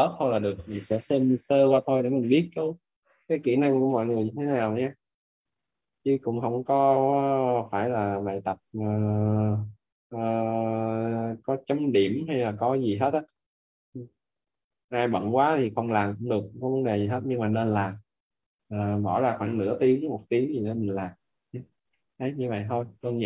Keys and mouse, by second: 5.4 click, 9.6 click, 12.5 right click, 13.8 click, 14.7 right click, 15.3 click, 15.7 right click, 18.7 click, 20.4 right click, 21.8 right click, 23.1 right click.